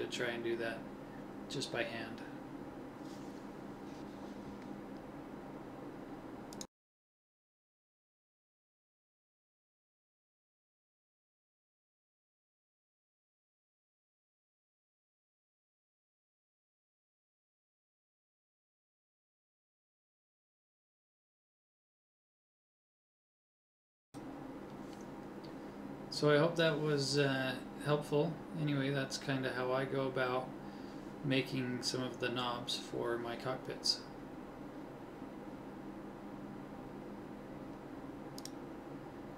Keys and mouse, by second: 1.1 KP_1, 2.8 click, 6.7 l, 7.9 click, 12.0 middle click, 12.7 middle click, 12.9 middle click, 13.8 middle click, 15.5 ctrl+e, 19.0 u, 20.2-21.3 middle drag, 22.2 KP_1, 23.8 middle click, 26.8 a, 29.5 ctrl+s, 32.1 Tab, 35.2 middle click, 36.9 right click, 37.5 Tab, 37.5 click, 38.2 Tab, 38.7 Tab, 39.2 Tab.